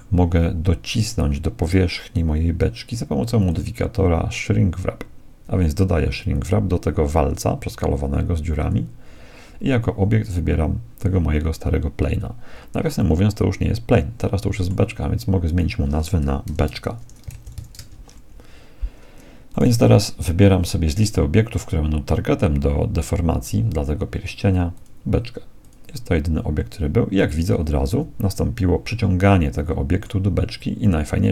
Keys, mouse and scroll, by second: 3.4-5.3 drag, 10.3-12.1 right drag, 13.0-14.9 middle drag, 15.5-17.3 drag, 19.6-21.3 right drag, 24.7-26.7 drag, 27.5-30.8 middle drag, 27.9 z.